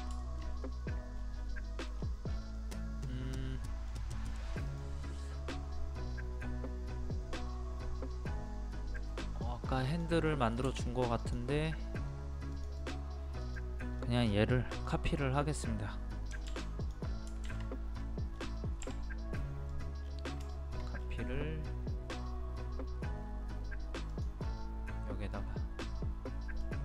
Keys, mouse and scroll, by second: 0.2 shift+middle click, 1.2 scroll up 1, 1.5 middle click, 2.0 scroll down 1, 2.6-4.7 middle drag, 9.0 middle click, 9.9 click, 10.3 middle click, 11.2 click, 11.7-12.0 scroll up 1, 12.5 click, 14.0 middle click, 15.4 scroll up 1, 16.8 click, 18.3 scroll up 1, 18.9 m, 19.7 click, 20.0 scroll down 1, 20.5 shift+middle click, 21.0 scroll up 1, 24.1 click, 24.5-26.7 middle drag, 26.7 middle click.